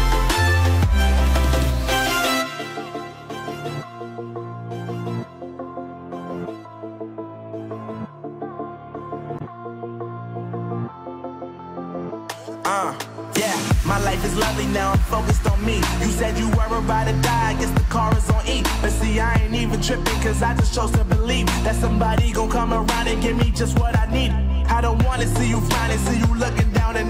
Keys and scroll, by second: 4.4 Delete, 6.9 ctrl+d.